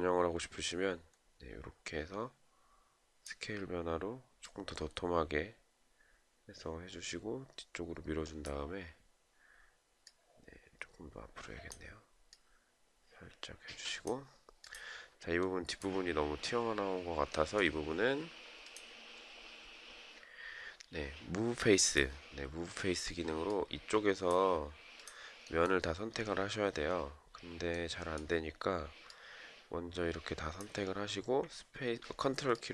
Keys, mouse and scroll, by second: 32.0 ctrl+click.